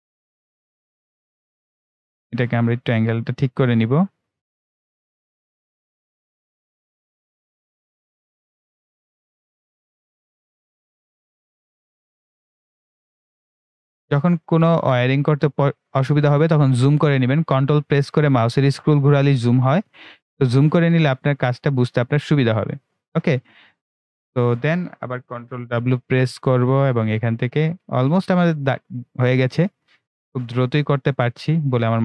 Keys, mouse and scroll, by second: 3.7-4.4 scroll up 2, 4.7-10.5 drag, 10.5-10.8 ctrl+scroll up 1, 11.2 click, 14.0-14.3 ctrl+scroll down 1, 17.7 right click, 18.6-19.5 ctrl+scroll up 1, 19.5 ctrl+right click, 20.4-20.9 ctrl+scroll up 1, 22.5 right click, 23.4-25.8 ctrl+right drag, 25.8 ctrl+w, 26.9 click, 28.7-29.6 scroll down 1, 29.9 ctrl+scroll down 1, 31.0-32.0 right drag.